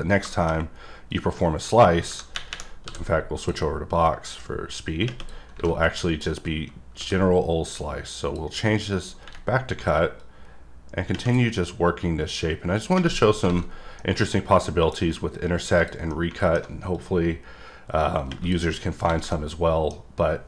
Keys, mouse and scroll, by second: 0.3 middle click, 0.5-1.1 scroll up 1, 1.1 click, 4.0 click, 6.0 click, 8.2 click, 8.9 click, 10.2 click, 12.2 click, 13.3 scroll, 13.3-14.0 scroll down 4, 14.0 middle click, 14.3 scroll down 1, 14.7 middle click, 15.7 click, 16.1 middle click, 16.9 click, 18.7 middle click, 19.3 middle click.